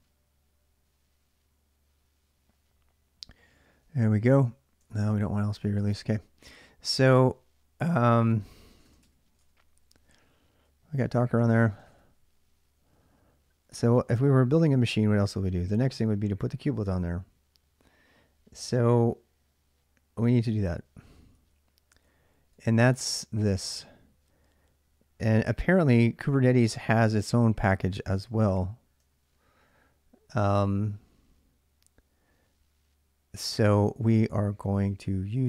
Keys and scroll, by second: 0.0-2.5 typing, 3.6-4.0 j, 4.7 ctrl+[, 5.1 shift+z, 5.3 shift+z, 6.6-12.7 typing, 8.8 Tab, 9.2 Return, 18.9-23.4 typing, 26.8-29.4 typing.